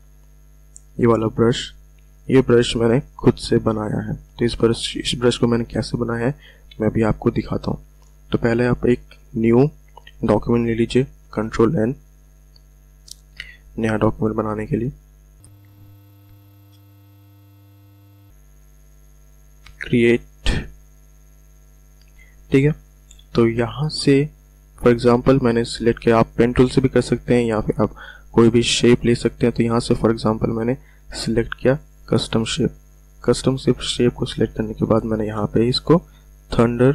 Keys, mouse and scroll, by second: 0.5 click, 11.2 ctrl+n, 19.7 click, 23.5 v, 28.5-31.7 drag, 36.0-36.9 drag.